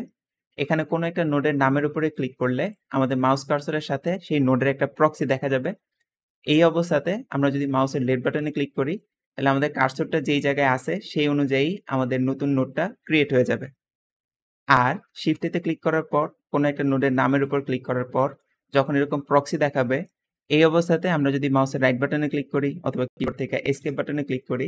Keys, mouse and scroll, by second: 10.1 `, 13.9 Escape, 15.1 shift+a, 23.7 Escape.